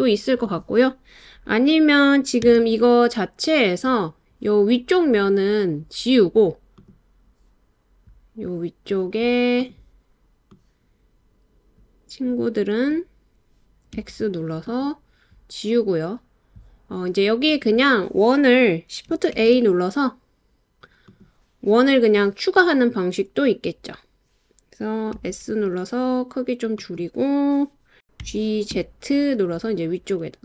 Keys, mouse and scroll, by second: 2.4 Tab, 6.8 click, 9.7 click, 10.8-12.9 drag, 13.9 x, 17.5 click, 19.3 shift+a, 25.1 s, 26.8 click, 28.0 Escape, 28.2 g, 28.7 z.